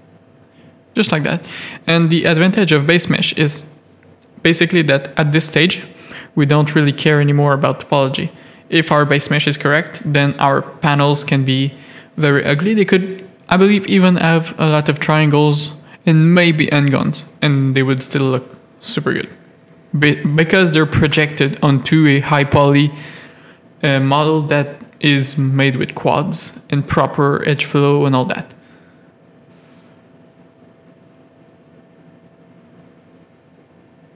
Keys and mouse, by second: 2.4 g, 6.6 click, 7.6 click, 8.1 ctrl+r, 12.0 click, 14.1 ctrl+click, 14.4 g, 16.9 g, 18.1 g, 20.1 click, 20.6 g, 22.2 g, 23.2 click, 24.0 g, 25.2 Tab, 25.6 alt+a, 26.1 z, 27.5 middle click, 29.5 z, 30.0 Tab, 31.3 click, 31.8 click, 31.9 g, 33.2 middle click.